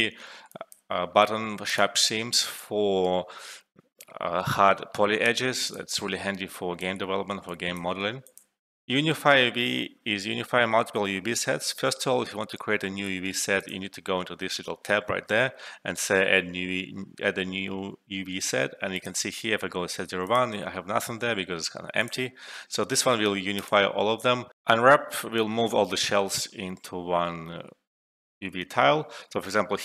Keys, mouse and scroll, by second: 0.2 alt+middle click, 0.5 alt+click, 5.6 click, 6.2 alt+middle click, 6.5 alt+click, 7.0 alt+middle click, 7.4 alt+click, 7.9 alt+middle click, 8.2 alt+click, 8.6 alt+F12, 13.5 click, 18.9 click, 24.5 alt+F12.